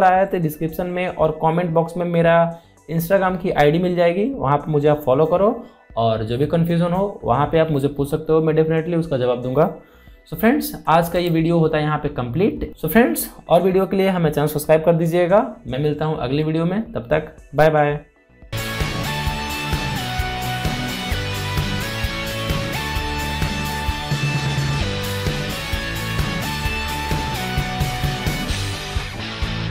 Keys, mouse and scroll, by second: 11.0 alt+Num_Lock, 11.2-11.8 alt+scroll down 2, 11.8 click, 12.2 alt+scroll up 2, 13.5-15.3 scroll down 2, 15.3 scroll down 1.